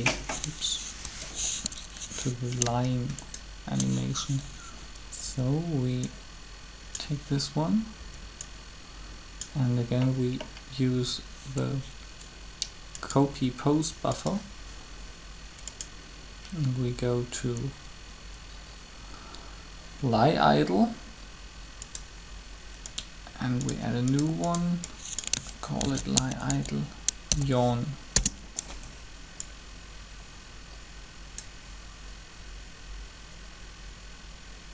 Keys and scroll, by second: 1.0 ctrl+Escape, 5.3 b, 8.0 b, 25.5-27.0 typing, 28.1 Return.